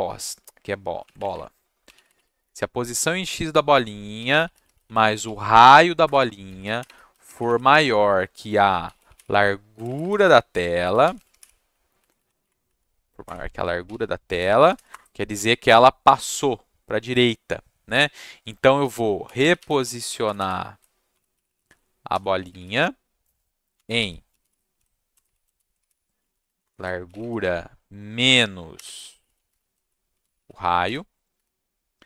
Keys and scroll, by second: 1.0 shift+Left, 1.1 shift+Left, 1.3 shift+Left, 1.6-2.6 typing, 3.9-11.8 typing, 6.0 Return, 12.0 Down, 12.1 Down, 12.4 Up, 12.6 Down, 13.2 Return, 13.6-14.7 typing, 19.0-22.5 typing, 23.7-31.3 typing, 26.4 Down, 26.6 Return.